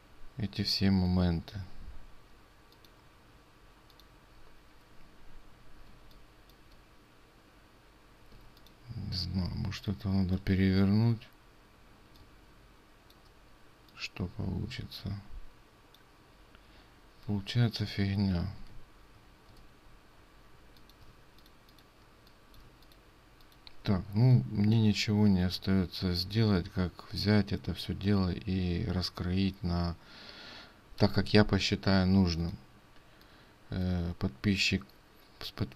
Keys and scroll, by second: 18.7 ctrl+z, 19.6 ctrl+z, 23.0 ctrl+space, 23.0 ctrl+z.